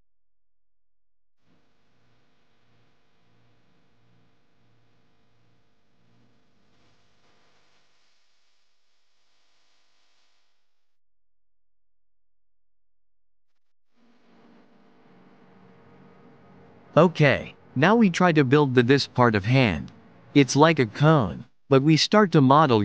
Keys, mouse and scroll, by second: 1.0 click, 1.6-2.1 scroll down 1, 2.4-4.2 scroll down 3, 7.9 click, 11.4 shift+click, 11.9 shift+click, 12.3 shift+click, 13.8-15.0 drag, 15.7 shift+a, 22.3 shift+a.